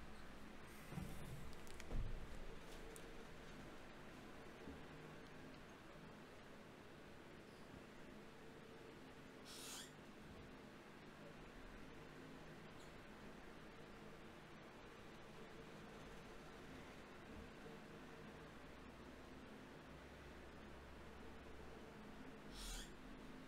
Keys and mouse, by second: 1.2 s, 2.7 g, 5.3 ctrl+r, 8.9 ctrl+z, 10.0 ctrl+r, 13.6-15.8 middle drag, 16.0 middle click, 17.2 right click, 17.6 click, 17.8-19.0 right drag, 19.2-20.6 right drag, 20.2-22.0 typing.